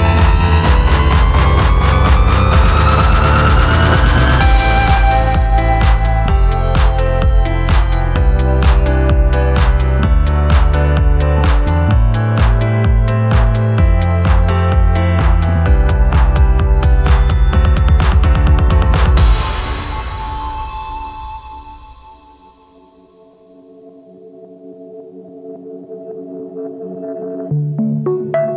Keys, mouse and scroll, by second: 0.9 click, 2.3 scroll down 2, 3.2-4.6 drag, 12.4 right click, 13.9 click, 15.9 right click, 17.0 click, 18.0 click, 20.5-21.9 typing, 23.3 click, 25.1 scroll down 2, 25.4 alt+middle click, 25.9 scroll down 2, 26.1 alt+click, 26.9 alt+click, 28.2 click.